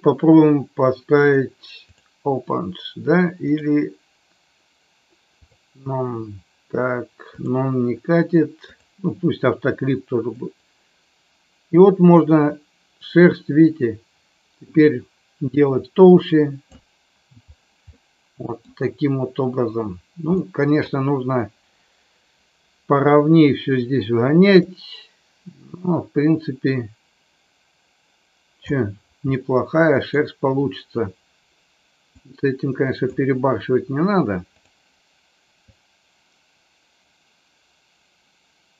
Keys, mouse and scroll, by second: 3.4-5.5 drag, 7.4-8.8 drag, 10.4-16.7 drag, 17.9 middle click, 20.3-20.9 middle drag, 24.8-28.5 drag, 29.3 middle click, 32.0-34.5 drag, 35.8-38.7 drag.